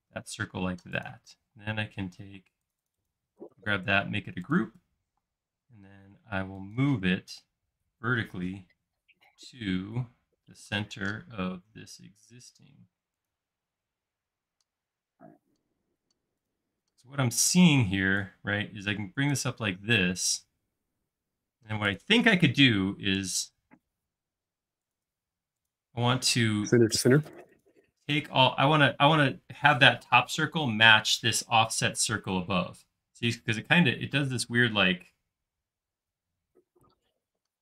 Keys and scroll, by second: 0.3 space, 1.4 m, 2.4 space, 5.2 m, 7.7 Up, 13.7 space, 17.3 space, 17.7 p, 19.8 space, 23.2-24.1 typing, 25.1-25.9 typing.